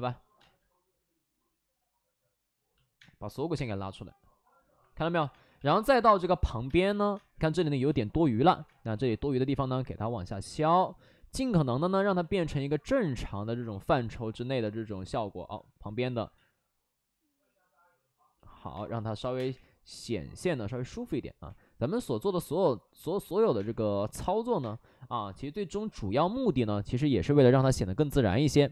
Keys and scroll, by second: 0.3 space, 2.9 space, 5.4 space, 5.7 space, 6.1 2, 6.6 space, 8.6 space, 8.8 ctrl+z, 16.0 alt+s, 16.2 ctrl+z, 18.5 alt+s, 18.7 space, 19.1 3, 19.3 space, 19.4 3, 21.4 2, 23.5 space, 24.5 space, 26.9 ctrl+z, 27.3 alt+s, 27.5 1, 28.1 ctrl+z.